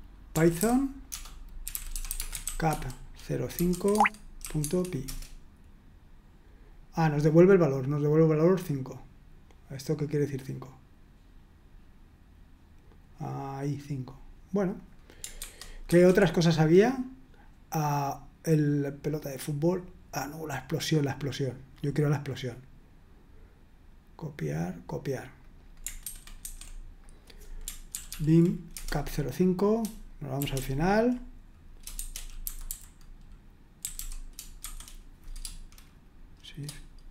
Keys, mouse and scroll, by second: 0.1-4.4 typing, 3.9 Tab, 4.6 Tab, 5.0 Return, 8.5 click, 14.7 click, 15.4 super+1, 15.9 super+2, 19.0 click, 20.6-21.8 drag, 25.4 click, 26.1 super+2, 26.5 super+1, 27.0 click, 27.9 ctrl+p, 28.1 ctrl+p, 28.7 Return, 30.4 typing, 31.7-34.6 typing.